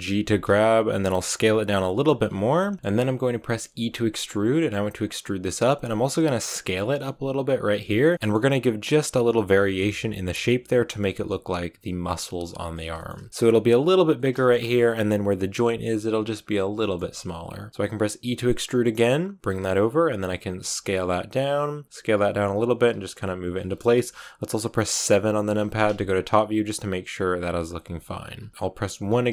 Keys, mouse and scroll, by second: 0.0 g, 2.4 s, 2.7 shift+middle click, 3.6 e, 6.5 s, 7.6 g, 8.1-13.3 shift+middle drag, 13.3 s, 14.3 shift+middle click, 14.5 scroll up 1, 16.7-18.1 shift+middle drag, 18.1 e, 20.4 s, 21.8 r, 22.1 g, 22.7 r, 23.1 s, 25.4 KP_7, 27.3 s, 28.0 g, 28.4 s, 28.8 KP_1.